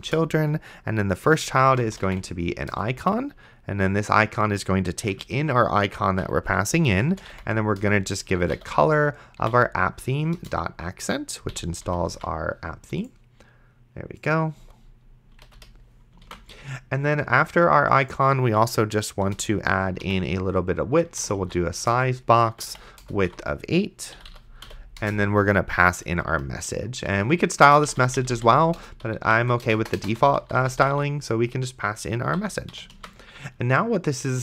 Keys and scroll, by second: 1.6-2.8 typing, 5.1 Right, 6.2 ,, 7.1 space, 7.2 c, 7.5 o, 7.8 Return, 8.6-10.1 typing, 10.4 Return, 11.5 End, 11.9 ,, 12.4 ctrl+s, 15.4 ,, 15.5 Right, 15.6 ,, 16.5 ctrl+s, 19.3 Return, 19.6-23.3 typing, 21.9 Return, 24.2 Delete, 24.3 End, 24.7 ,, 25.0 Return, 26.7-31.5 typing, 32.4 End, 32.7 ,, 33.2 ctrl+s.